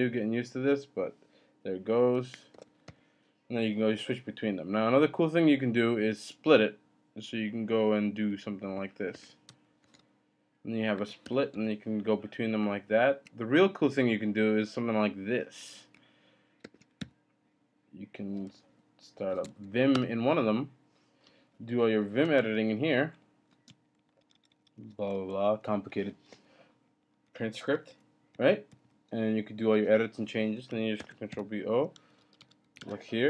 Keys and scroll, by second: 2.5 ctrl+b, 2.9 n, 9.1 ctrl+b, 11.1 %, 11.2 ctrl+b, 11.5 o, 16.6 ctrl+b, 17.0 o, 18.1-21.2 typing, 19.9 Return, 21.3 Down, 21.4 Down, 21.5 Down, 21.7 Down, 22.1 Up, 22.2 space, 22.4 Down, 23.1-23.8 Down, 23.5 space, 23.7 Down, 23.9 Down, 24.0 Down, 24.2 Up, 24.8 Up, 25.1-25.8 Up, 25.8 Down, 26.3 Down, 26.9 Down, 27.0 Page_Down, 27.3 Page_Up, 27.4 Up, 27.9 Up, 28.7 Down, 31.0 ctrl+b, 31.3-33.2 typing, 32.1 Return.